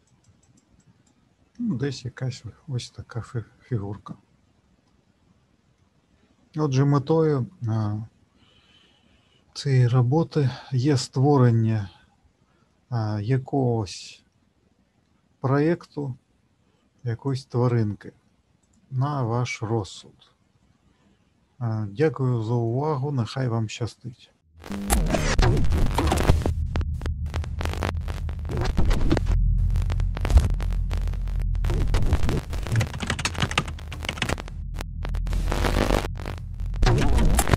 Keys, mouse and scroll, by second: 1.9 middle click, 4.8 middle click, 10.5 middle click, 17.2 click, 19.7 middle click.